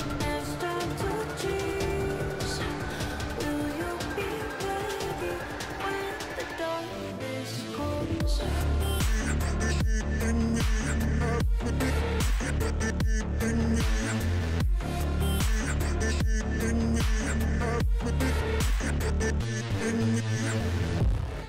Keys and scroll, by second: 10.1 Delete.